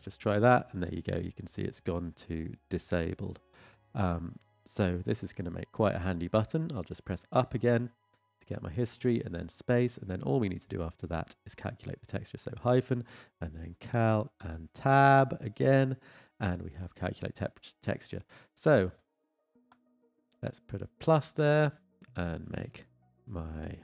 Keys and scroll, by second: 15.4 Tab.